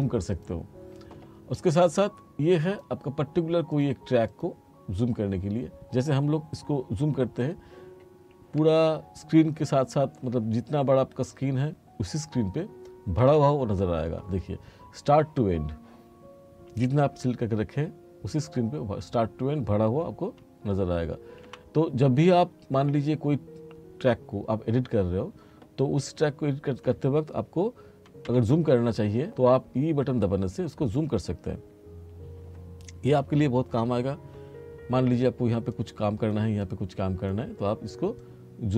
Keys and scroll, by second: 13.3 e, 21.5 e, 28.3 e.